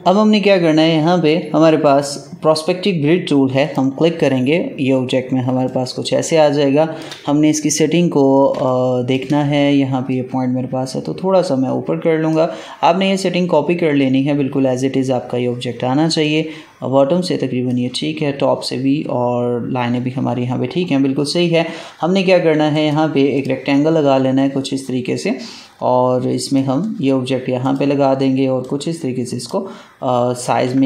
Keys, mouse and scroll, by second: 1.8 right click, 3.5 click, 5.5 space, 5.6 click, 5.9 space, 8.6 click, 9.0 space, 10.0-16.1 drag, 16.1-22.7 drag, 22.7 right click, 23.3-30.3 drag, 30.3 ctrl+z.